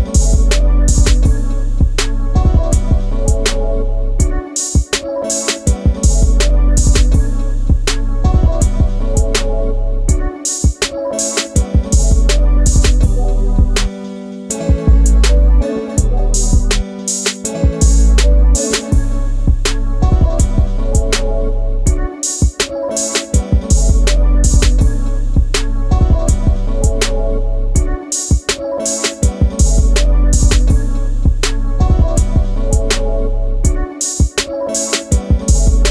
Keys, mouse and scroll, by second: 2.2 middle click, 5.9 shift+click, 6.1 click, 6.2 shift+double click, 6.4 middle click, 7.4 m, 8.7 click, 8.9 middle click, 9.1 shift+double middle click, 9.6 space, 14.7 space, 14.7 Escape, 15.7 shift+middle click, 18.2 click, 18.4 scroll down 1, 18.5 middle click, 19.1 m, 21.2 space, 21.9 m, 23.1 click, 23.4 middle click, 24.5 s, 25.8 space, 27.8 middle click, 29.0 click, 33.2 middle click, 33.7 scroll down 1, 33.8 middle click, 35.7 middle click.